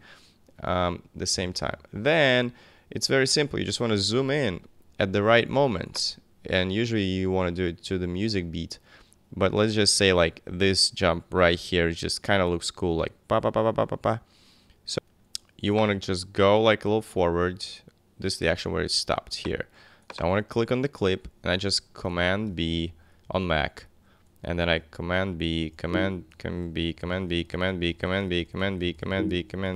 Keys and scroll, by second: 1.3 v, 3.7 super+=, 22.5 super+b, 23.2 super+Left, 24.5 super+Left, 24.6 super+b, 25.2 super+Left, 25.6 super+b, 25.7 super+Return, 26.3 Left, 26.6 super+b, 26.9 super+Left, 27.1 super+b, 27.3 super+Left, 27.5 super+b, 27.7 super+Left, 27.9 super+b, 28.1 super+Left, 28.3 super+b, 28.4 super+Left, 28.7 super+b, 28.8 super+Left, 29.0 super+b, 29.1 super+Left, 29.4 super+b, 29.5 super+Left.